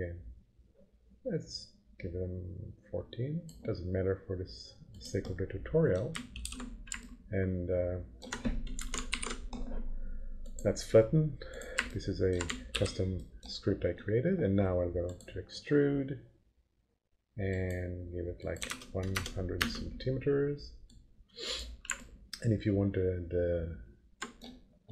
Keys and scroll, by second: 6.4 ctrl+[, 9.1 ctrl+alt+f, 12.7 ctrl+p, 18.6 1, 19.6 Return.